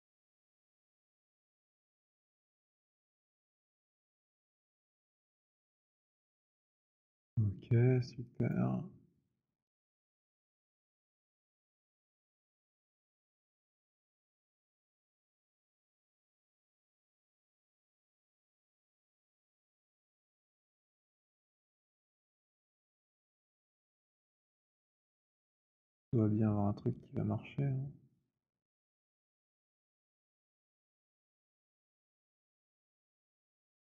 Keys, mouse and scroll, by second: 1.0-7.1 typing, 7.1 middle click, 8.6 click, 11.8 click, 18.2 click, 20.1 click, 21.1-22.5 alt+scroll, 22.5 right click, 23.5 alt+click, 24.8 click, 30.7 click.